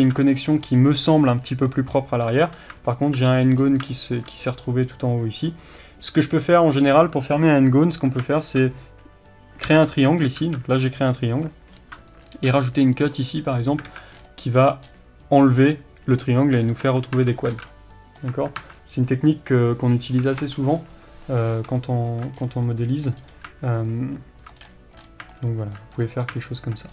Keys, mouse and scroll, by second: 0.1 alt+a, 2.0-2.9 scroll down 1, 3.4 scroll up 1, 4.5-5.4 scroll up 1, 5.4 click, 9.7 j, 10.4 alt+a, 11.8 ctrl+r, 12.3 click, 12.5 s, 13.9 alt+a, 14.2-14.8 scroll down 1, 14.9-16.1 scroll up 1, 16.1 click, 16.6-16.9 scroll down 1, 16.9 Tab, 17.6 alt+a, 17.8-20.9 middle drag, 18.3 Tab, 21.6 scroll up 2, 21.9 shift+middle click, 22.4-22.7 scroll down 2, 22.7 middle click, 23.2-24.1 scroll up 2, 24.1 shift+middle click, 24.7-25.4 scroll down 2, 25.4 shift+middle click, 26.0-26.5 scroll up 2, 26.5 shift+middle click.